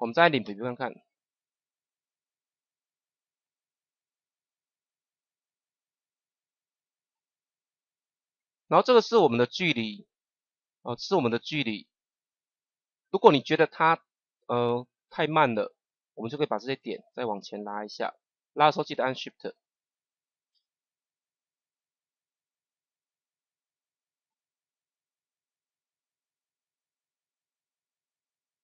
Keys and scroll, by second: 0.4 KP_0, 20.5 KP_0.